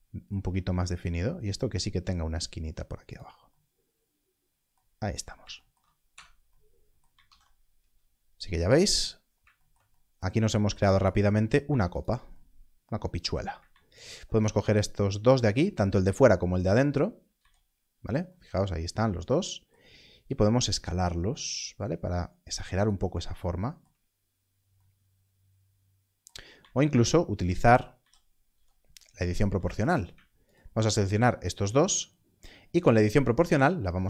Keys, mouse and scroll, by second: 0.6 ctrl+r, 4.8-5.3 scroll down 1, 6.7 Tab, 7.2 alt+a, 9.1 scroll down 1, 10.7 Tab, 11.2-11.5 scroll, 13.9 alt+shift+click, 20.8 s, 22.7 click, 26.5 click, 26.6 alt+a, 27.0-27.9 scroll up 1, 27.9 z, 28.5 z, 29.8 alt+click.